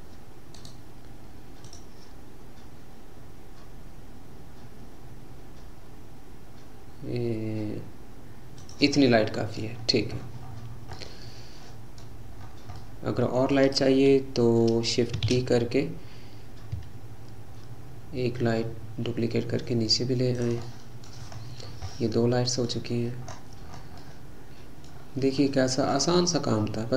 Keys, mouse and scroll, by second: 0.6-3.9 right drag, 9.0-9.8 middle drag, 9.8-10.5 scroll down 6, 10.5-11.0 scroll up 4, 11.0-12.1 middle drag, 12.1-12.7 scroll down 5, 12.7-15.5 middle drag, 15.5 shift+d, 20.7-21.3 middle drag, 21.3-22.0 scroll up 7, 22.0-22.9 middle drag, 22.9-23.3 scroll down 3, 23.3-24.3 scroll up 9, 24.3-25.1 middle drag, 25.1-25.6 scroll down 3, 25.6-26.9 middle drag.